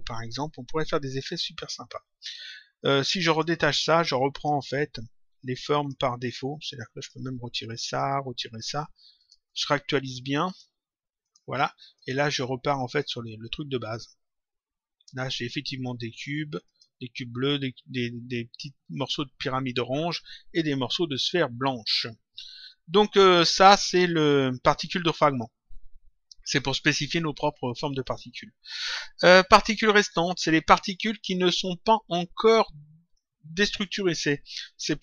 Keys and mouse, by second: 3.2 click, 4.6 Delete, 5.3 click, 6.9 click, 7.3 Delete, 7.8 click, 8.1 Delete, 9.1 click, 16.6 click, 22.7 click, 28.0 click.